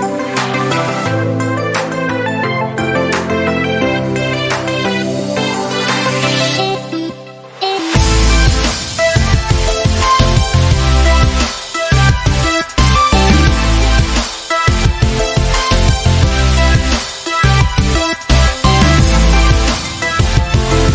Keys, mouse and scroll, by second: 5.0-5.3 click, 10.9-11.8 click.